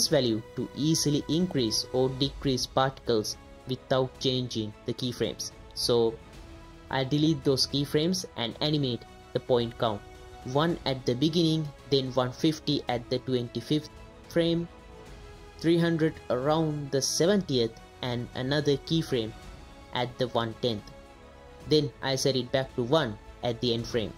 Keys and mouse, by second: 0.2 click, 3.0 click, 4.3 click, 5.6 click, 6.5 a, 7.2 x, 9.2-11.0 drag, 11.4 click, 12.4 click, 13.5-14.6 drag, 15.0 click, 16.2 click, 17.0 KP_0, 17.5 click, 17.8 drag, 18.5 click, 19.0-19.4 drag, 21.2 click, 23.8 click.